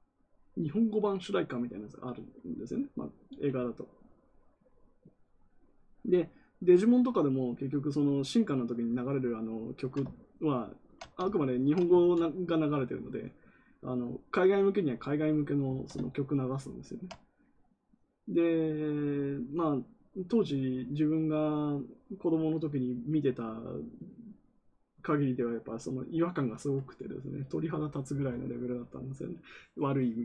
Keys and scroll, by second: 11.9 ctrl+z.